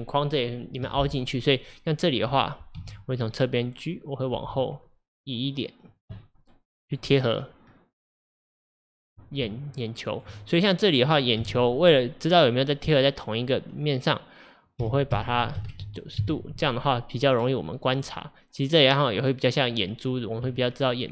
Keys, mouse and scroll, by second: 1.3-2.8 middle drag, 2.8 KP_3, 4.4 g, 6.2-7.7 middle drag, 7.7 scroll down 1, 9.5 Tab, 10.6 click, 11.4 KP_1, 14.8 r, 16.9 drag, 17.3 scroll up 1, 17.9 click, 20.5 Tab.